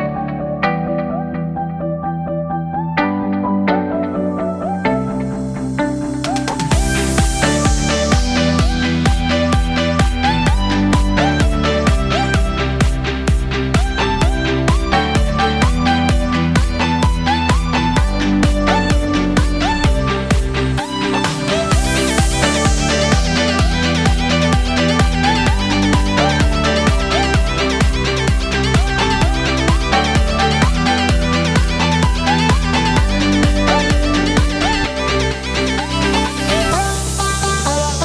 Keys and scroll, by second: 5.1 ctrl+j, 7.1 ctrl+j, 15.9 ctrl+j.